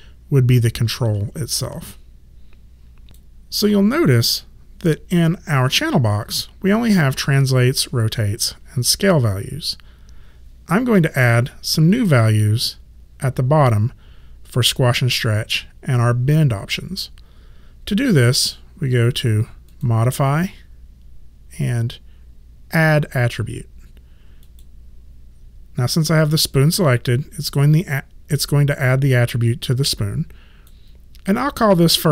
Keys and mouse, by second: 1.0 ctrl+z, 19.7 click, 24.4 click, 27.8 click, 31.3 click.